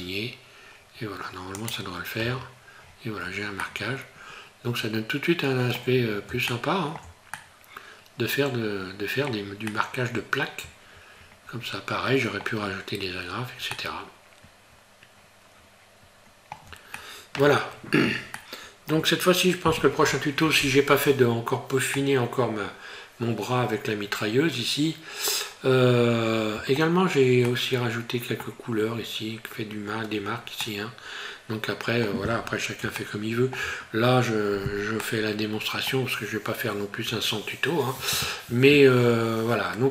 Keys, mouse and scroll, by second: 1.7 click, 2.2 Tab, 2.8 scroll down 4, 3.7 middle click, 6.1 scroll down 1, 6.5 shift+middle click, 7.3 middle click, 9.7 middle click, 13.3 scroll down 1, 13.7 middle click, 17.0 shift+middle click, 18.4 shift+middle click, 21.5 scroll down 1, 21.9 middle click, 27.1 scroll down 2, 27.5 middle click, 30.7 middle click, 33.0 shift+middle click, 35.1 middle click, 36.2 scroll up 1.